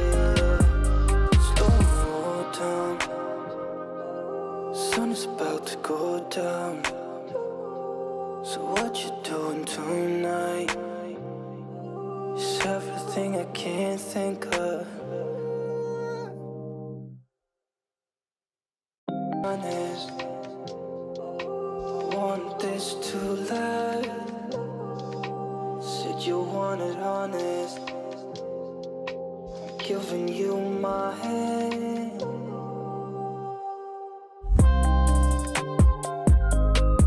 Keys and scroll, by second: 6.7 ctrl+z, 18.2 ctrl+space.